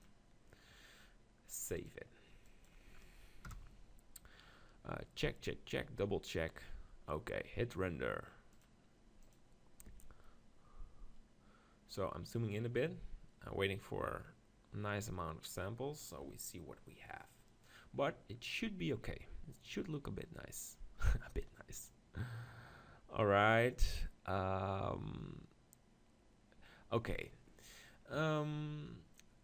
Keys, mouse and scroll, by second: 0.0-1.5 drag, 0.0 KP_9, 2.0-3.6 drag, 3.6 KP_0, 4.5-7.0 middle drag, 8.5-10.4 drag, 13.0-17.1 middle drag.